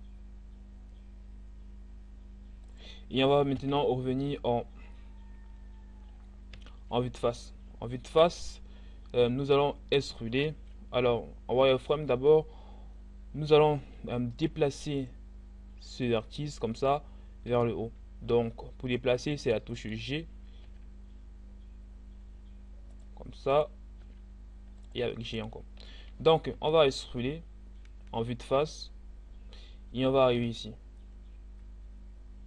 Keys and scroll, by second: 3.2 1, 6.6 z, 10.6 z, 17.8 g, 26.6 e.